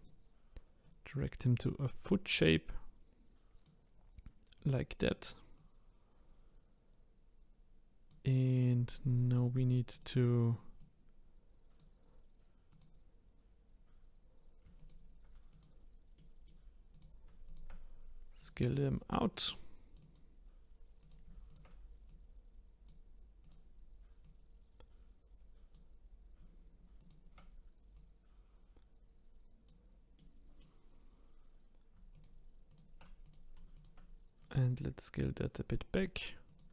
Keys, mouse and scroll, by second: 0.8 click, 4.5-5.6 drag, 8.9-9.9 middle drag, 9.9 click, 10.8-12.8 drag, 13.5-14.8 scroll up 2, 14.8 shift+click, 15.5 click, 16.1 middle click, 16.9 click, 17.4 shift+click, 18.4 click, 19.3 click, 20.0 click, 21.0 click, 21.5 shift+click, 22.1 click, 23.4 click, 24.2 click, 27.0 shift+click, 27.9 click, 30.2 middle click, 30.9-32.1 scroll down 3, 32.1 shift+click, 32.7 shift+click, 33.2 click, 33.7 shift+click, 34.4 click, 36.5 click.